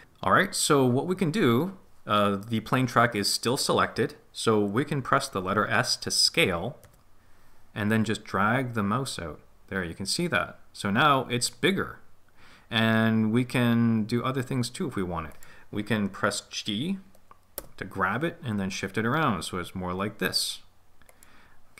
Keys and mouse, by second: 6.8 s, 15.3-16.4 drag, 17.5 g, 21.0 click.